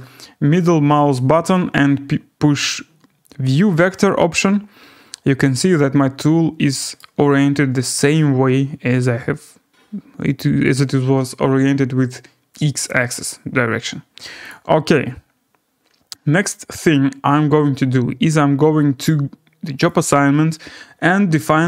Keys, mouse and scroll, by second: 3.0 scroll, 3.7 click, 7.0 middle click, 14.5 click, 19.9 click.